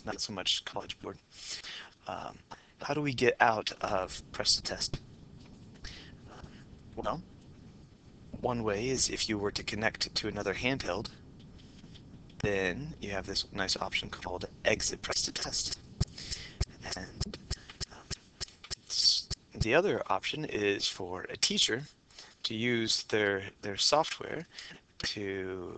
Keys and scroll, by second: 12.4 Return, 12.4 Escape, 12.4 Down.